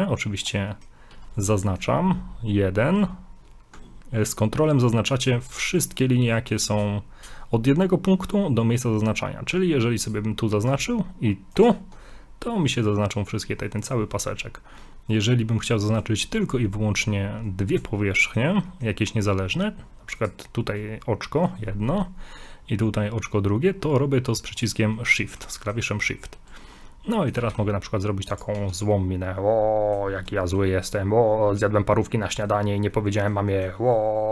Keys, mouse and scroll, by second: 0.7 middle click, 1.5 right click, 5.2 ctrl+right click, 10.0 right click, 11.5 ctrl+right click, 18.0 shift+middle click, 18.7 middle click, 20.2 right click, 20.8 right click, 21.9 middle click, 24.6 shift+right click, 25.1 middle click, 27.1 middle click, 27.4 g, 28.6 Tab, 28.7 middle click, 30.1 scroll down 2, 30.4 shift+middle click, 32.6 scroll up 2, 32.9 middle click, 33.8 middle click.